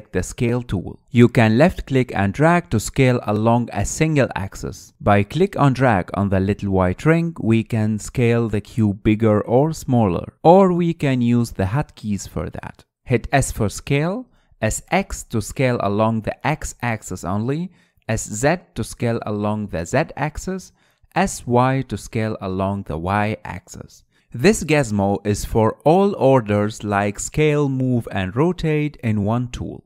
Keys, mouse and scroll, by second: 1.1-1.9 drag, 1.9-2.2 scroll up 2, 2.2-3.3 middle drag, 3.3 click, 4.3 click, 4.9 middle click, 5.5 click, 6.1 ctrl+z, 6.3 ctrl+z, 7.8 ctrl+z, 8.6 click, 11.2 ctrl+z, 13.5-14.5 scroll down 1, 14.5 s, 16.2 s, 19.4 s, 22.8 s, 27.1-28.3 drag, 28.9 click, 29.7 click.